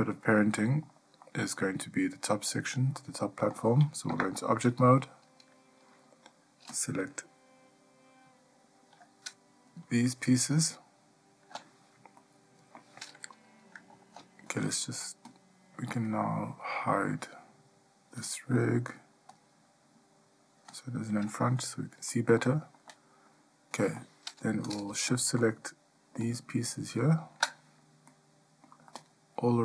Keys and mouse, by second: 0.6-1.1 shift+middle drag, 1.4 middle drag, 2.7-3.4 ctrl+middle drag, 4.3 Tab, 10.0 shift+click, 12.4-13.0 middle drag, 15.5 click, 18.4 click, 20.9 click, 22.3 middle drag, 23.1-24.1 shift+middle drag, 28.3-28.8 middle drag, 29.1-29.6 shift+middle drag.